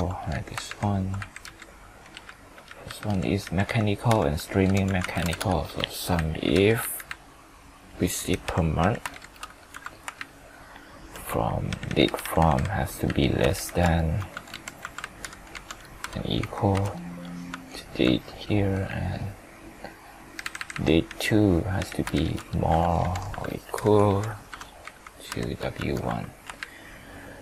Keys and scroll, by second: 1.3 ctrl+Left, 9.1 ctrl+shift+Down, 10.2 ctrl+Left, 13.5 ctrl+shift+Down, 16.7 F4, 22.1 ctrl+shift+Down, 25.3 F4, 26.6 ctrl+Left.